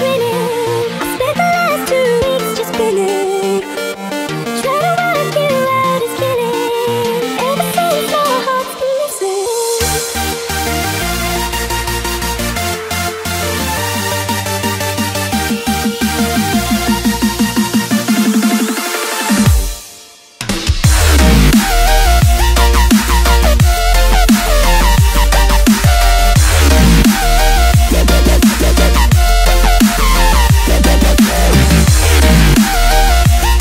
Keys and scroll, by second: 7.3 v, 8.0 space, 8.5 alt+super+space, 8.6 alt+super+space, 8.7 alt+super+space, 8.7 alt+super+space, 8.9 alt+super+space, 9.8 alt+super+space, 9.9 alt+super+space, 11.8 i, 13.0-14.7 typing, 20.2 space, 20.7 super+space, 20.8 super+space, 20.9 super+space, 20.9 super+space, 21.0 super+space, 23.1 u, 27.7 space, 28.3 alt+super+space, 28.3 alt+super+space, 28.4 alt+super+space, 28.5 alt+super+space, 28.6 alt+super+space, 28.8 alt+super+space, 29.3-31.5 typing, 30.3 alt+super+v.